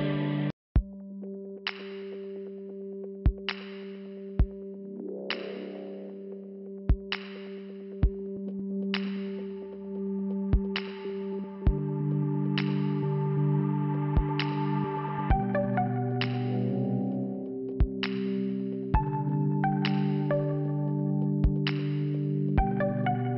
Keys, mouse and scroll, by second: 0.8 click, 2.0 click, 7.4 click, 7.5 click, 8.4 click, 9.3 click, 10.2 click, 10.3 click, 10.4 click, 14.3 click, 15.3 click, 19.0 scroll down 1, 19.1 scroll up 2, 20.3 scroll down 1, 21.0 scroll down 1, 22.3 click.